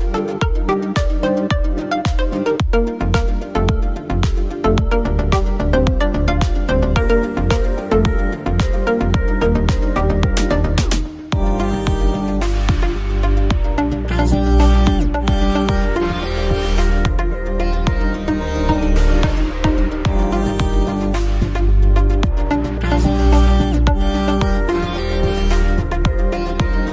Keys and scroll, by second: 5.2 ctrl+t, 12.0 a, 12.5 n, 13.9-14.9 typing, 20.5-22.0 typing.